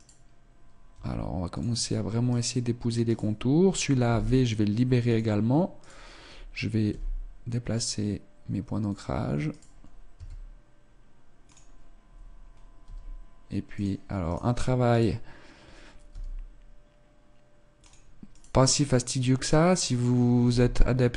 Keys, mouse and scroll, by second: 0.0 right click, 0.9 r, 2.3 right click, 2.5 right click, 4.1 v, 5.8 right click, 6.9 g, 9.5 right click, 10.1 s, 12.9 g, 14.3 right click, 16.0 right click, 16.1 g, 18.3 right click, 20.5 g, 20.9 click.